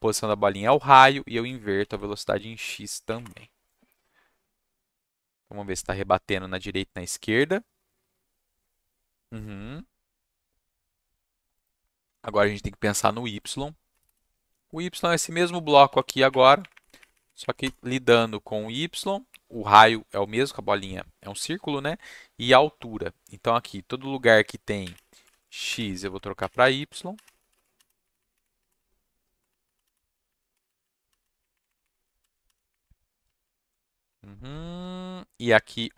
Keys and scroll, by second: 0.9 Down, 1.8 ctrl+s, 3.0 Up, 3.2 Return, 13.9 BackSpace, 14.0 BackSpace, 15.8 ctrl+shift+Down, 16.3 Up, 16.6 Up, 16.7 Up, 16.8 Up, 17.0 Up, 17.1 Up, 17.4 Up, 17.6 Return, 24.9-27.8 typing, 25.1 Down, 25.2 Left, 25.4 Left, 26.0 Left, 26.6 Down, 26.7 Down, 26.8 Left, 27.3 Down, 27.5 Left, 28.0 Up, 28.1 Up, 28.3 Up, 28.6 Down, 28.7 Right, 29.5 Right, 29.6 Right, 29.7-32.5 typing, 32.7 Up, 32.8 Up, 33.2 Left, 33.4 Left, 34.1 Right, 34.6 Down.